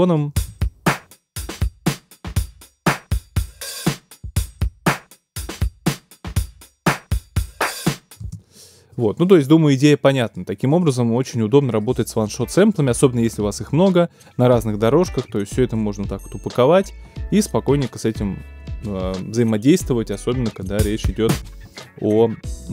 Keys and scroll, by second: 0.3 space, 8.2 space, 20.6 space, 21.6 super+space.